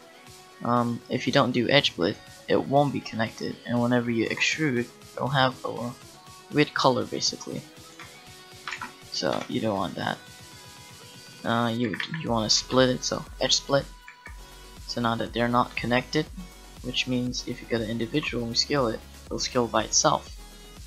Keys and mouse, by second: 4.8 e, 8.0 Tab, 8.8 ctrl+z, 9.4 Tab, 10.2 right click, 11.8 a, 12.2 a, 12.6 space, 14.1 a, 18.1 s.